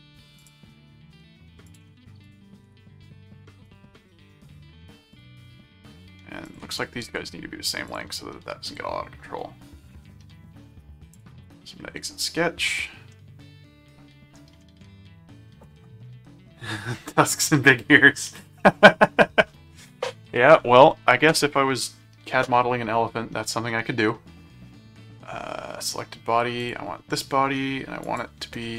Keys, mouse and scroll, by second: 0.3 click, 1.7 click, 2.2 alt+click, 2.6 alt+v, 3.6 ctrl+click, 4.2 ctrl+alt+a, 5.1 click, 5.9 ctrl+click, 6.7 ctrl+alt+click, 7.0 ctrl+alt+q, 7.8 click, 11.1 click, 13.1-14.3 middle drag, 14.6 middle click, 26.6 click, 28.0 click.